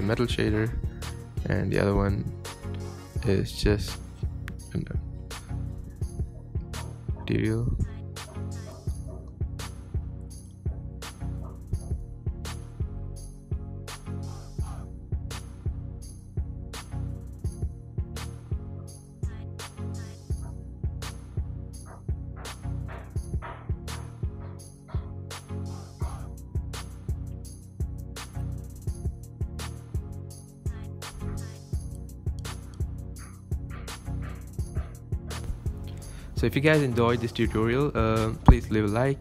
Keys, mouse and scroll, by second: 0.1 ctrl+b, 0.7 middle click, 0.8 Tab, 0.9-1.2 scroll down 3, 1.0 middle click, 2.1 click, 2.3 scroll up 2, 2.3 Tab, 2.5 Tab, 2.5 shift+middle click, 2.8 click, 2.9 click, 3.5 click, 5.3 click, 6.3-8.0 drag, 8.1 Tab, 8.4 ctrl+KP_Add, 8.5 ctrl+KP_Add, 8.6 ctrl+KP_Add, 9.0 click, 9.2 scroll down 4, 10.1 click, 10.7 click, 11.6 click, 12.5 scroll down 2, 12.8 click, 13.5-13.9 middle drag, 13.9-14.2 scroll up 7, 14.4 scroll down 5, 15.0 click, 15.2 Tab, 15.7 click, 16.1 scroll up 2, 17.1 click, 17.2 click, 17.4 scroll down 2, 17.8 KP_3, 18.3 click, 18.8 scroll up 3, 18.8 scroll down 1, 18.9 shift+middle click, 19.1 click, 19.4 scroll down 7, 19.6 shift+middle click, 19.7-20.2 scroll up 6, 20.0 click, 20.3 shift+middle click, 20.7 shift+click, 21.0 ctrl+j, 22.0 click, 22.2 scroll down 8, 22.6 scroll up 8, 23.1 scroll down 6, 23.4 scroll up 5, 24.6 click, 25.0 KP_3, 25.5 click, 25.6 scroll up 3, 26.1 click, 26.9-27.9 scroll up 12, 27.2 shift+middle click, 27.5 shift+middle click, 27.9 click, 28.4 Tab, 28.4 scroll down 11, 29.7 click, 30.1 Tab, 30.6 click, 30.7 Tab, 30.8-31.4 scroll down 3, 30.9 shift+middle click, 31.0 Tab, 31.4-33.6 typing, 33.0 drag, 34.1 click, 34.9 space, 36.6-37.5 scroll up 2, 38.1-38.5 scroll down 1, 38.6 space.